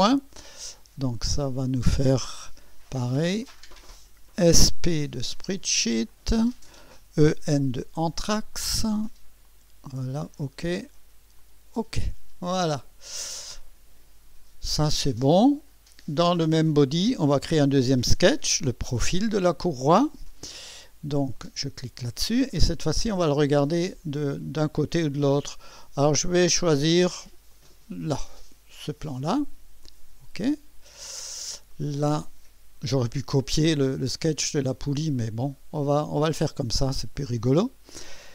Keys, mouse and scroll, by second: 1.1 click, 3.4 click, 4.4-4.8 typing, 6.1 click, 6.9-8.0 typing, 8.5 click, 9.5 click, 10.2 click, 11.4 click, 15.2 click, 21.3 click, 27.5 click, 29.8 click, 31.2 scroll up 2, 31.7 right click, 32.4-32.9 scroll up 2, 34.7-35.2 scroll up 2, 35.2-36.2 right drag.